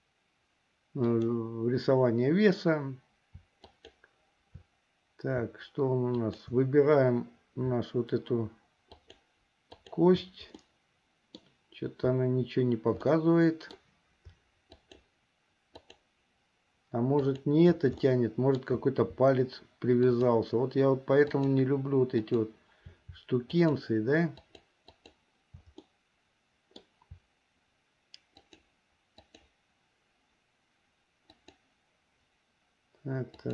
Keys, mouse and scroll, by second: 3.7 shift+click, 6.2 shift+click, 8.9 shift+click, 9.9 shift+click, 10.8 middle click, 13.2 middle click, 14.8 shift+click, 15.9 shift+click, 17.2 shift+click, 18.3 shift+middle click, 20.2 shift+click, 21.4 shift+click, 22.4 shift+click, 23.6 shift+click, 24.7 shift+click, 25.2 shift+click, 26.0-27.0 middle drag, 28.4 shift+click, 29.4 shift+click, 31.3 shift+click, 33.4 shift+click.